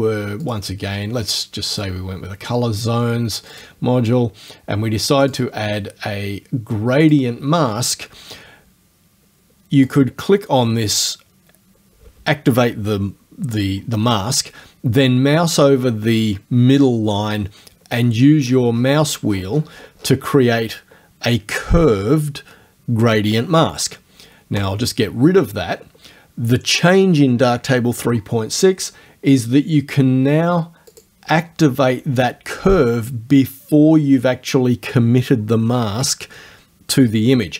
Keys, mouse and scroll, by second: 0.4 click, 1.8 click, 3.6 click, 5.3 click, 7.1 click, 9.9 click, 17.8-18.7 scroll down 1, 18.8-20.2 scroll down 1, 24.6 right click, 30.9 click.